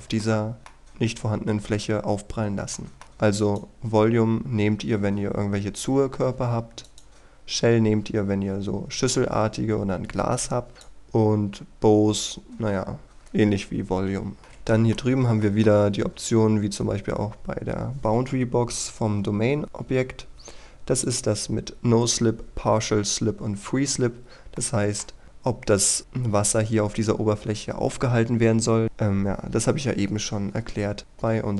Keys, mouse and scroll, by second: 2.8 shift+middle click, 3.4 click, 5.4-6.9 scroll down 1, 6.9 click, 14.8 middle click, 15.4 shift+middle click, 21.0 click, 24.6 middle click, 28.8 click.